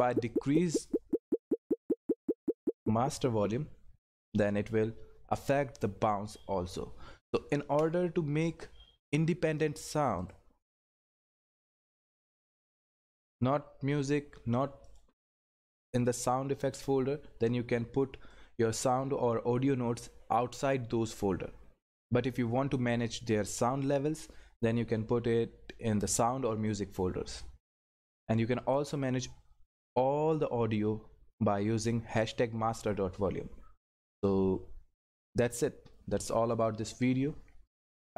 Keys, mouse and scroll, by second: 10.6-11.1 scroll up 1, 13.2 click, 18.3-20.1 drag, 20.1-21.0 scroll up 1, 23.8 scroll up 1, 28.4-32.1 drag.